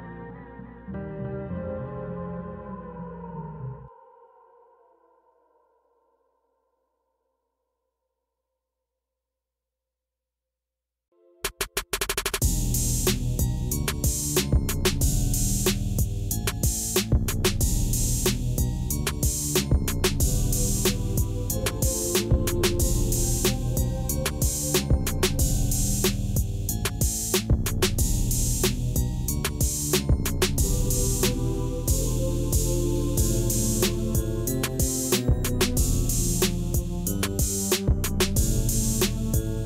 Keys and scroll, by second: 7.2 shift+z, 8.7 shift+z, 9.4 g, 12.2 alt+a, 14.9 Tab, 18.3 alt+a, 18.8 Tab, 36.7 Tab.